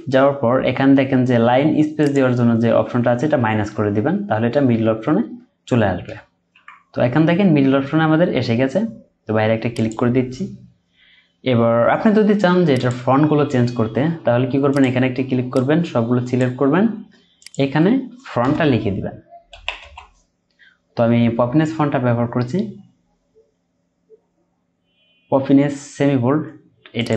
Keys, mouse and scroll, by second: 2.8 Down, 3.2 Down, 4.5 Down, 5.3 Down, 6.5 Up, 10.6-12.7 scroll down 1, 18.4 BackSpace, 19.5 typing.